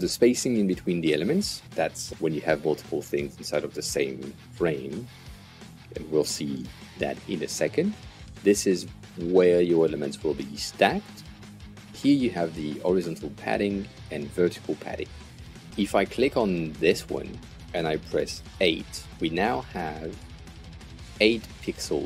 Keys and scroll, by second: 18.2 8, 19.1 Return.